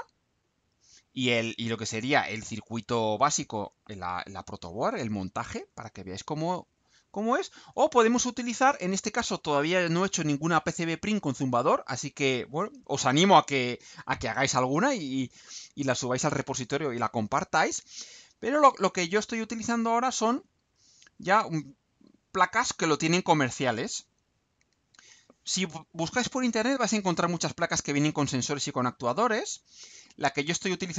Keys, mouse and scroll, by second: 0.3-1.6 scroll down 6, 6.3 scroll down 2, 6.9-7.2 scroll down 2, 17.8-18.1 scroll down 2, 20.0 scroll up 2, 21.6-22.1 scroll down 2, 28.7-29.2 scroll down 2.